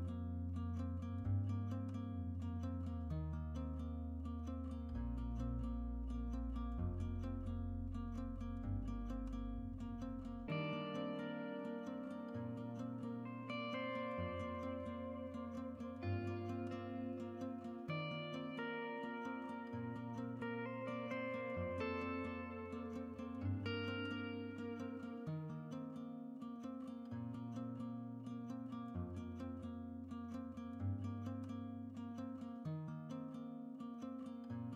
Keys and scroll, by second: 6.1-9.1 typing, 13.6-14.3 typing.